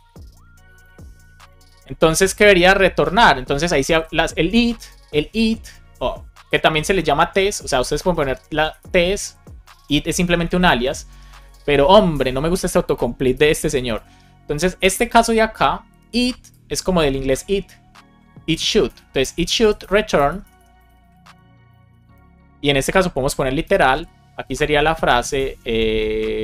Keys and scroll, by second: 0.0-1.7 typing, 2.0 Return, 2.5 Down, 2.9 Up, 4.0 shift+9, 4.9 super+x, 4.9 super+z, 6.2 Return, 6.8 Up, 7.0 Down, 7.1 Up, 7.4 Tab, 8.3 BackSpace, 9.6 alt+shift+Left, 10.6 shift+9, 11.4 super+z, 12.1 super+z, 13.3 shift+9, 13.9 space, 18.8 space, 19.1 BackSpace, 20.1 BackSpace, 21.1 space, 22.2 space, 23.6-25.4 typing, 23.8 Left, 25.5 Left, 26.3 Right.